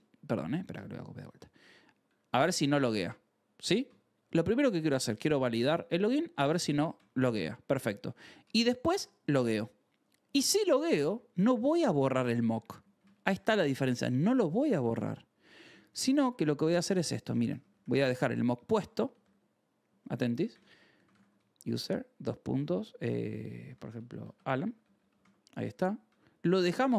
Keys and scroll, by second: 0.0-2.5 typing, 3.8 shift+v, 4.4 shift+4, 5.7-11.8 typing, 6.7 ctrl+s, 11.4 ctrl+s, 12.9-26.4 typing, 13.5 Escape, 26.8 ctrl+s.